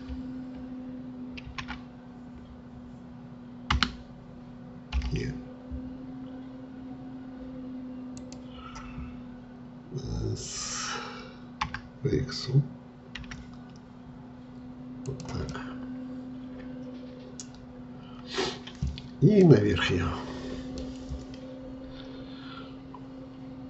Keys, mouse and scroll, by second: 1.5 ctrl+r, 11.7 s, 15.5-18.5 middle drag, 19.4-22.5 middle drag.